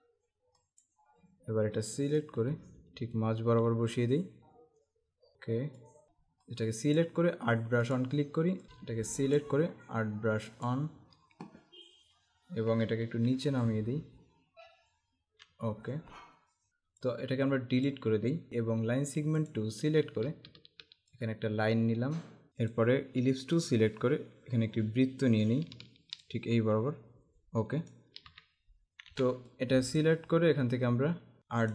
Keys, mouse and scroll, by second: 0.7 click, 2.3 click, 6.0 z, 6.5 click, 8.6 ctrl+z, 9.1 click, 10.6 click, 13.4 Down, 16.7 typing, 17.1 click, 18.5 Delete, 19.6 click, 22.8 right click, 23.6 click, 26.2 alt+shift+click, 29.1 v, 29.5 click.